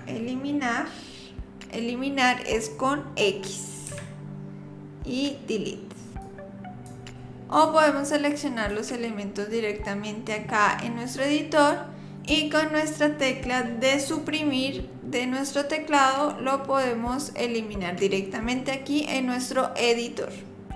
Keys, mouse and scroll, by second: 3.9 x, 7.4 click, 7.5 click, 8.5 click, 12.2 click.